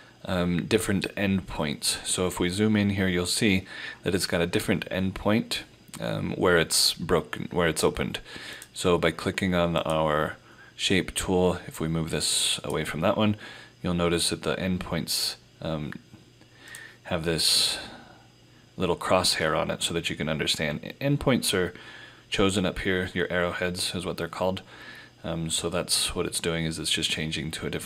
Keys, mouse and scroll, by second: 2.4 click, 2.4-3.2 scroll up 1, 6.0 scroll down 1, 8.6 click, 16.7 click.